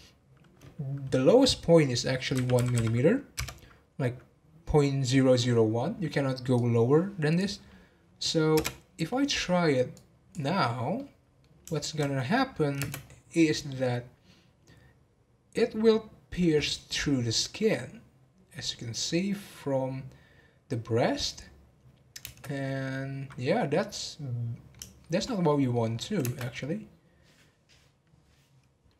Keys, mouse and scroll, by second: 6.5-9.6 drag, 9.9-10.9 drag, 10.9-12.0 middle drag, 12.0 scroll down 2, 12.3 middle click, 12.8 space, 22.6-25.9 middle drag, 25.9 scroll up 2, 26.2 space.